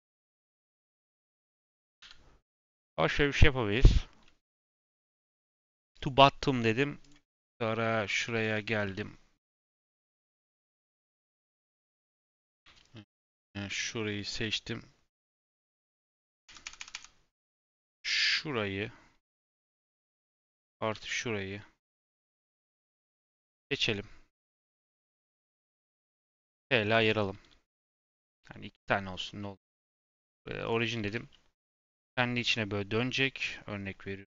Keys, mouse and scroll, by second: 0.6 click, 1.0 click, 2.0 n, 5.2-5.9 scroll down 2, 5.9-7.1 drag, 7.2-8.0 scroll up 1, 8.0-8.4 shift+middle drag, 8.4 click, 8.6 Tab, 8.8 3, 9.7 KP_7, 10.2-10.8 scroll down 2, 10.8 KP_Decimal, 12.6 1, 12.8 click, 16.2-16.7 KP_Add, 19.5-20.9 middle drag, 20.9 l, 22.2-25.1 middle drag, 25.1 KP_Add, 25.2 KP_Add, 26.0 p, 27.0 Tab, 27.7 click, 28.0 click, 28.3 g, 29.1 scroll down 2, 29.2-29.7 middle drag, 29.7-30.9 right drag, 30.9 r, 31.7 r.